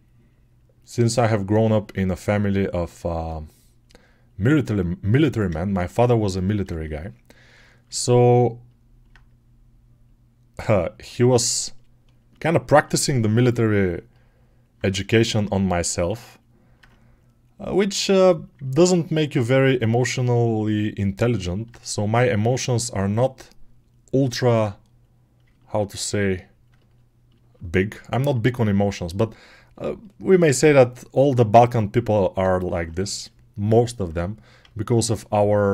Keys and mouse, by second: 13.5-15.7 alt+shift+right drag, 15.7-25.4 alt+drag, 25.4-26.8 ctrl+alt+right drag, 26.8 ctrl+alt+middle click, 32.4-34.5 alt+drag.